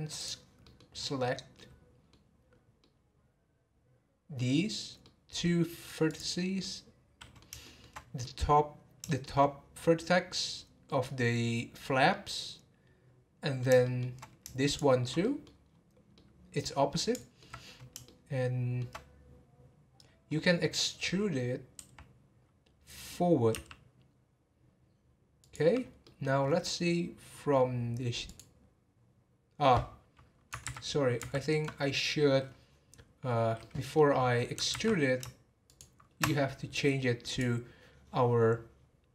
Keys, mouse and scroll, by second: 0.2 click, 0.6 middle click, 0.9-1.3 scroll up 6, 1.5-4.6 middle drag, 4.6-5.0 scroll up 1, 5.0-6.0 middle drag, 6.0 click, 6.6-8.0 middle drag, 8.0 scroll up 2, 8.2-10.0 middle drag, 10.0-10.6 scroll down 1, 10.6 scroll down 1, 10.8 middle click, 11.3 scroll up 3, 11.8 scroll down 1, 12.1-13.6 middle drag, 13.6 scroll down 1, 13.8-14.6 shift+middle drag, 14.6 shift+click, 15.2 middle click, 15.5 scroll up 1, 15.6 scroll down 1, 16.1-17.6 middle drag, 17.6-18.0 scroll down 1, 18.0-19.2 shift+middle drag, 19.2 scroll down 4, 20.3 scroll up 4, 21.7 e, 25.8 scroll down 3, 26.0 middle click, 26.4 scroll up 4, 27.0 scroll down 3, 28.2 click, 30.7 ctrl+z, 31.2 ctrl+z, 31.8 middle click, 32.4 scroll up 2, 33.3 scroll up 2, 33.6-34.7 middle drag, 34.7 ctrl+z, 35.7 shift+click, 37.2 click.